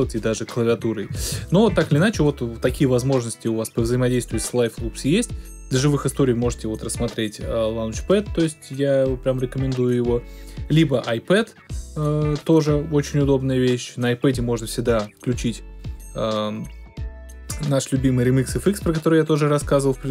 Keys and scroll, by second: 0.7 Left, 1.1 Right, 1.7 Left.